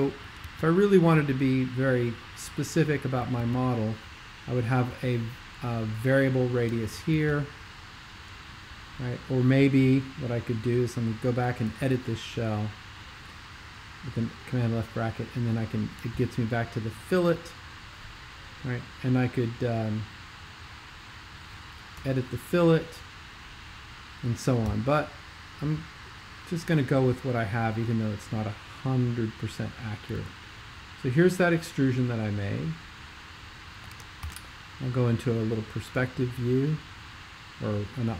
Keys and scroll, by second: 0.5 super+2, 3.5 super+2, 7.3 super+2, 11.7 super+[, 22.1 super+[, 24.6 super+], 25.6 super+], 30.2 x, 34.3 alt+shift+super+l.